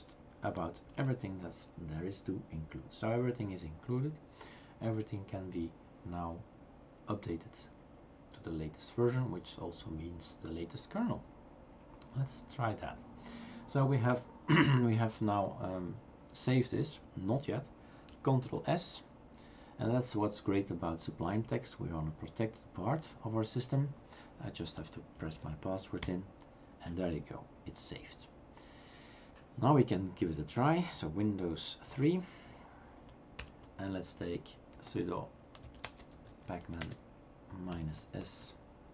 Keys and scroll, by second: 0.0 BackSpace, 0.9 BackSpace, 18.4 ctrl+s, 26.0 typing, 31.9 super+", 33.5 super+Return, 35.7-38.9 typing.